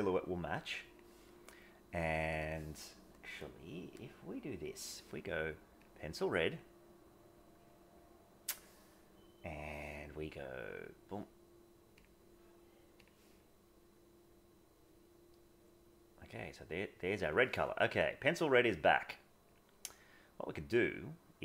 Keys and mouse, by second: 2.0 click, 4.0-4.6 drag, 5.9 click, 18.7 click.